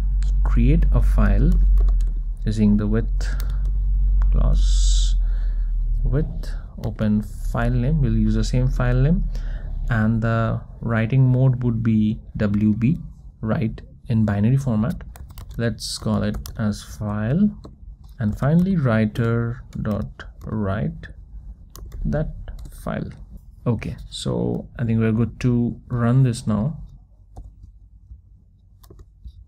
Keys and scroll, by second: 4.6 Return, 7.7 Return, 19.2 Return, 19.9 Return, 25.8 alt+F12.